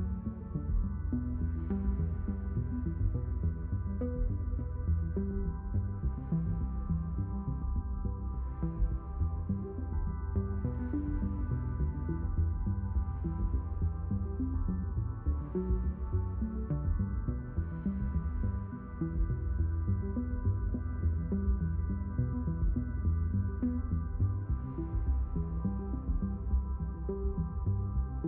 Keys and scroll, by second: 2.8 space, 3.9 space, 5.2 ctrl+alt+x, 7.4 ctrl+alt+x, 13.7 ctrl+shift+x.